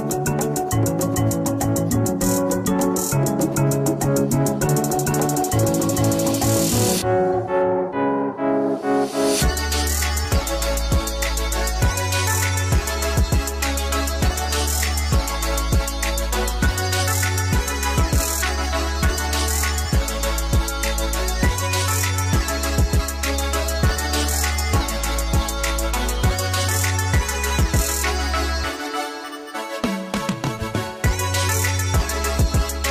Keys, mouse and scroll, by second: 0.0 click, 3.0 KP_0, 3.2 click, 5.6 shift+middle click, 5.7 scroll up 2, 5.9 Tab, 6.2 click, 6.4 Return, 6.4 click, 7.2 click, 7.8 middle click, 8.0 click, 8.7 KP_Enter, 8.7 click, 8.8 Tab, 8.8-10.3 middle drag, 8.9 KP_0, 9.1 ctrl+b, 9.8 scroll up 2, 10.3 Return, 10.3 click, 10.4 middle click, 10.8 click, 10.9 KP_Enter, 11.2 z, 11.6 z, 11.7 middle click, 11.8 click, 11.9 Return, 12.2 KP_Enter, 12.2 click, 12.4 shift+middle click, 12.6 Tab, 12.7 ctrl+r, 13.0 click, 13.1-14.2 shift+middle drag, 14.1 g, 14.2 right click, 14.3 alt+shift+click, 14.5 click, 14.5 g, 14.8 alt+click, 14.9 click, 15.0 g, 15.1 click, 15.2 g, 15.3 middle click, 15.3 scroll, 15.3 click, 15.5 shift+middle click, 15.5 shift+click, 15.7-16.8 middle drag, 15.8 scroll up 1, 15.8 ctrl+r, 16.1 click, 16.4 Tab, 16.6 scroll up 2, 16.7 ctrl+r, 16.8 right click, 16.9 KP_Divide, 16.9 middle click, 17.0 click, 17.4 middle click, 18.0 Return, 18.0 click, 18.3 click, 18.5 middle click, 18.7 click, 18.9 ctrl+z, 19.1 Return, 19.1 click, 19.3-20.4 shift+middle drag, 19.6 scroll down 2, 19.7 scroll up 2, 19.9-20.4 scroll down 4, 20.0 x, 21.3 scroll up 2, 21.4 ctrl+z, 21.7 click, 21.9 middle click, 22.0 z, 22.1 KP_0, 22.2 scroll up 2, 22.9 click, 25.7-27.3 middle drag, 25.7 KP_0, 25.9 z, 27.0 scroll up 2, 27.1 scroll down 2, 27.3 Tab, 27.3 click, 27.5 Return, 27.5 click, 27.8 click, 28.0 z, 28.2 middle click, 28.6 middle click, 28.7 alt+shift+click, 29.4 shift+middle click, 29.8 alt+shift+click, 30.0 ctrl+z, 30.3 middle click, 30.6 click, 31.1 click, 31.1 middle click, 31.4 click, 32.3 Return, 32.3 click, 32.8 z.